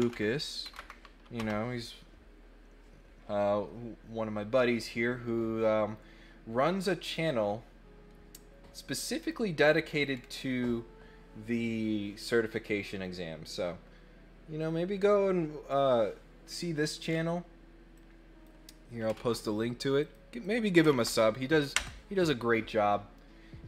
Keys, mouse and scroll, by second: 7.0 click, 9.2 click, 10.1 scroll down 2, 17.0 scroll up 1, 17.9 click, 20.0 click, 20.4 click.